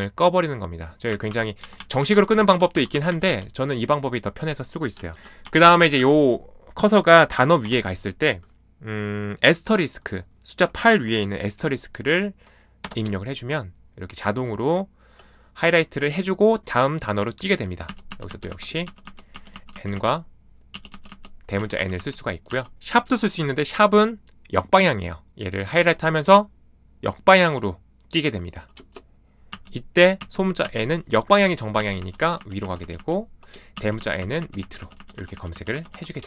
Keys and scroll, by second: 0.8-7.6 typing, 12.8 *, 17.9-23.2 typing, 25.7 #, 29.5 n, 30.2 n, 31.4-35.9 typing.